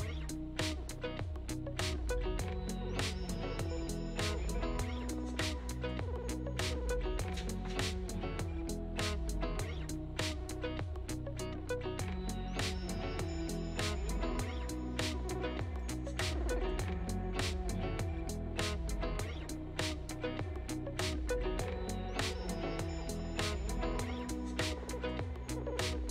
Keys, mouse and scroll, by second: 4.5-6.6 drag, 7.0 shift+a, 10.5 shift+middle click, 10.7-11.3 scroll down 1, 11.3-12.5 drag, 12.5 shift+a, 15.7-17.9 drag, 18.6-20.9 drag, 22.2 click, 22.9 ctrl+s, 23.5-26.1 drag.